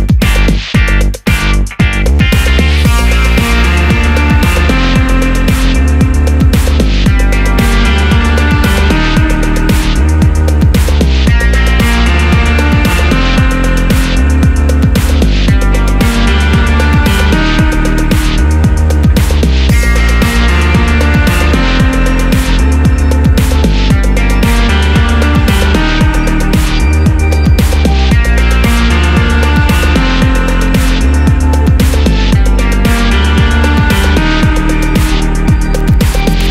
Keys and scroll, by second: 2.5 super+a, 32.2 super+d.